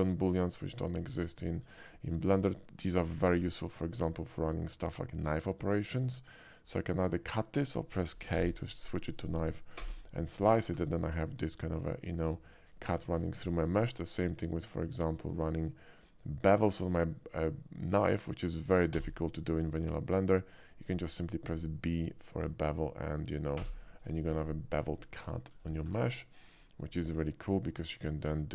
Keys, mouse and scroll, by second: 0.5 alt+middle click, 0.8 alt+middle click, 1.2 KP_5, 1.6 shift+middle click, 2.4 click, 4.9 click, 5.6 click, 6.1 click, 7.1 click, 8.4 k, 9.8 space, 10.4 middle click, 10.8 Tab, 12.1 alt+middle click, 12.4 alt+middle click, 13.1 ctrl+z, 14.2-15.3 drag, 16.2 click, 17.0 click, 17.4 click, 18.0 click, 19.1 b, 22.8 click, 23.7 space, 24.4 Tab, 24.8 click, 25.1 middle click, 26.5 click, 26.9 middle click, 28.1 middle click.